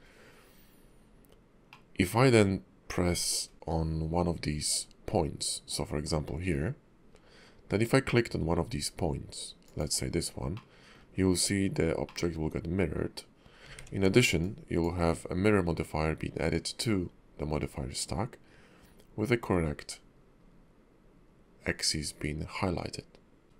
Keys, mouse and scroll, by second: 0.5-1.7 scroll up 1, 1.7 middle click, 9.6 click, 10.6 middle click, 12.0 middle click, 13.7 ctrl+`, 23.4 ctrl+z, 23.4 shift+middle click, 23.4 scroll down 1.